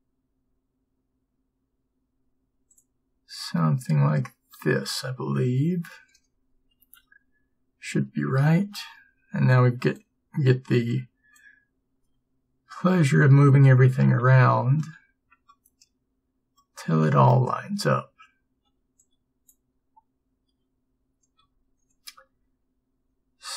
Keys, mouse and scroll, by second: 6.9 a, 13.4 b, 21.6 b, 21.6 g.